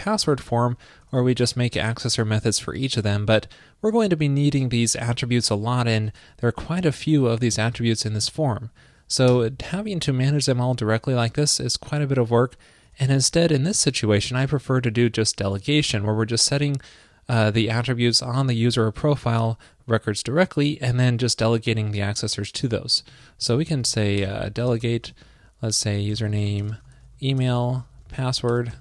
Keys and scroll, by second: 8.7 shift+super+Right.